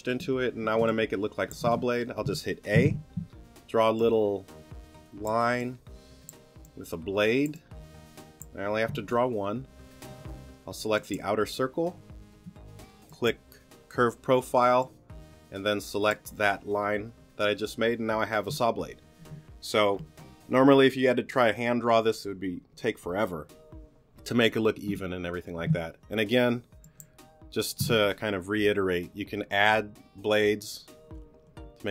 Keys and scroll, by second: 0.8 space, 2.7 a, 9.0 t.